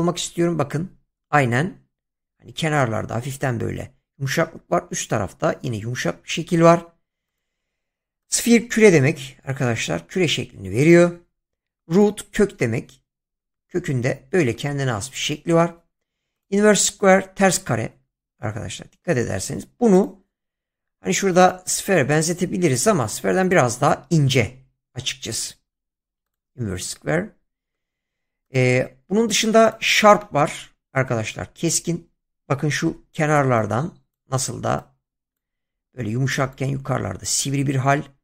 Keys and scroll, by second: 32.9 <.